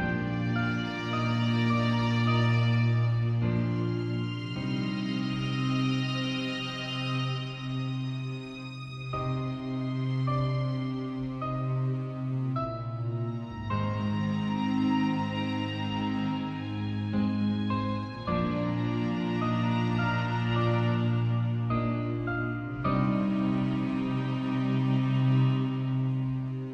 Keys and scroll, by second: 6.8 v, 8.0 z.